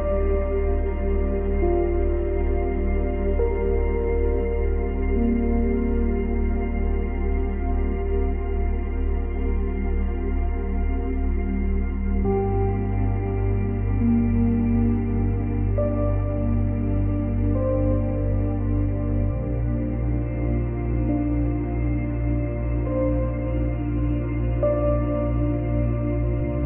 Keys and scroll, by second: 19.9 space, 20.8 space, 21.0 ctrl+z, 22.7 space, 23.5 space.